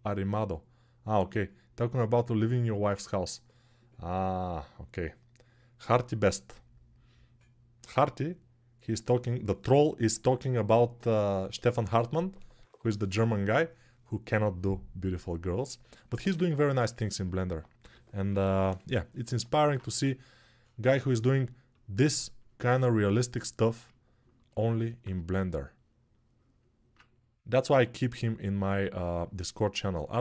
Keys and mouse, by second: 17.5 g, 18.0-21.3 right drag, 18.1 ], 18.2 ], 19.6 1, 21.3-30.2 alt+drag.